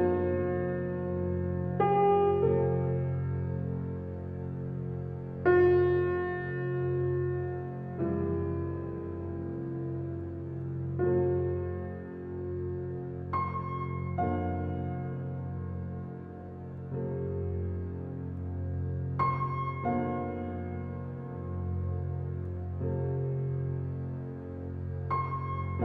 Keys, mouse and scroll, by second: 0.6-2.9 drag, 2.9 Tab, 4.2 alt+middle click, 5.3-5.9 scroll up 6, 7.7-11.0 drag, 11.0 alt+z, 14.9 click, 15.4 click, 18.1 click, 18.8 click, 22.5-25.4 drag, 25.4-25.8 scroll down 1.